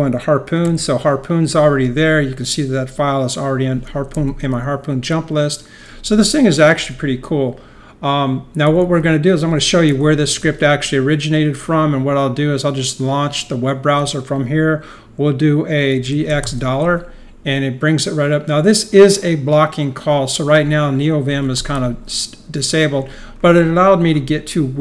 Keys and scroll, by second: 0.6 alt+7, 3.2-4.7 typing, 8.9-10.8 typing, 15.8-16.9 typing, 21.1-22.4 typing.